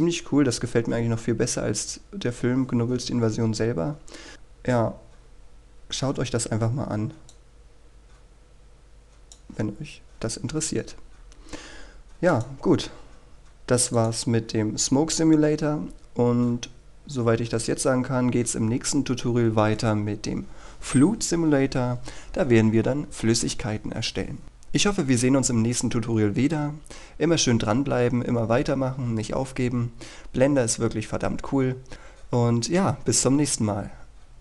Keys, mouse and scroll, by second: 11.0-11.3 scroll down 1, 11.3-13.3 scroll up 1, 13.3 click, 16.5-17.6 scroll down 1, 17.6-20.9 scroll up 1.